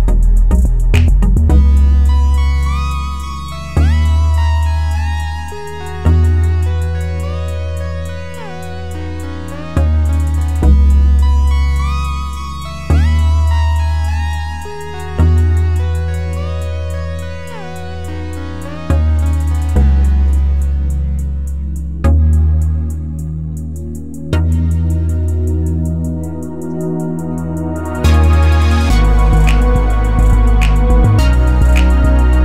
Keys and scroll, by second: 9.9 3, 10.2 Return, 11.7 ctrl+z, 21.8 3, 22.1 Return.